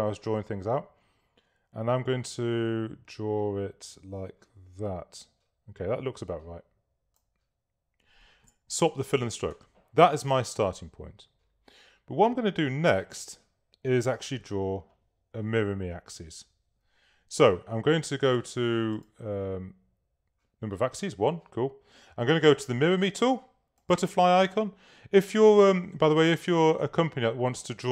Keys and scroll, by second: 8.8 shift+x.